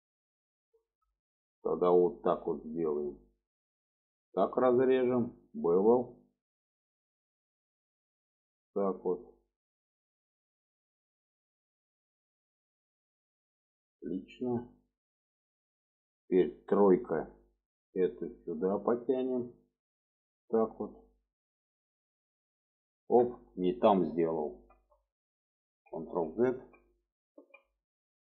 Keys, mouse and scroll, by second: 0.0 middle click, 0.7 shift+middle click, 1.5 shift+middle click, 2.9 click, 4.3 click, 5.6 click, 6.6-11.0 drag, 11.0-13.8 middle drag, 16.2 click, 17.1 3, 17.7 click, 18.0 middle click, 19.0-20.5 drag, 20.8-23.1 middle drag, 24.0 ctrl+z, 25.1 middle click.